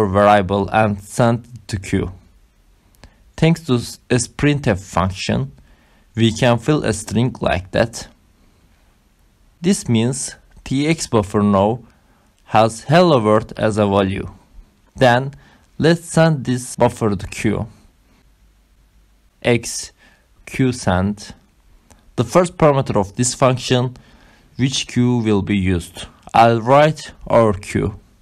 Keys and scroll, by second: 0.2 Up, 1.0-11.1 typing, 12.2 Right, 13.2 shift+,, 14.5 Return, 19.6-23.4 typing, 24.8-26.1 typing, 27.5-28.2 typing.